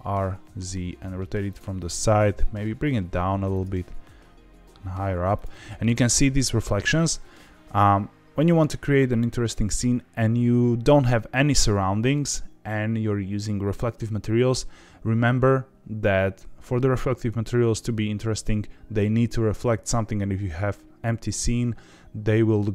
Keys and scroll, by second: 1.8 r, 2.1 x, 2.3 x, 3.6 g, 3.6 z.